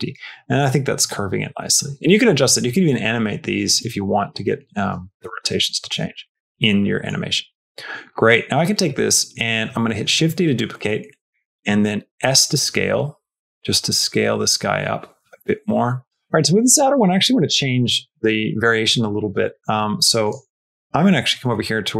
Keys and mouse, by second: 5.7 space, 6.2 shift+middle click, 6.7 middle click, 7.3 Tab, 7.7 middle click, 8.1 middle click, 8.7 middle click, 9.8 shift+d, 12.0 s, 16.0 x, 20.1 click.